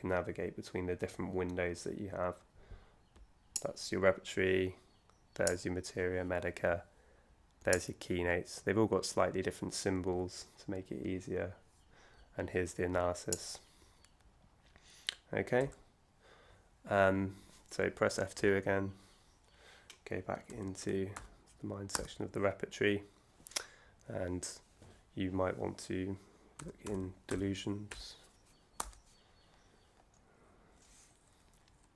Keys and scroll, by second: 18.4 F2, 20.2-21.6 typing, 21.9 Return, 26.4-27.3 typing, 28.7 Return.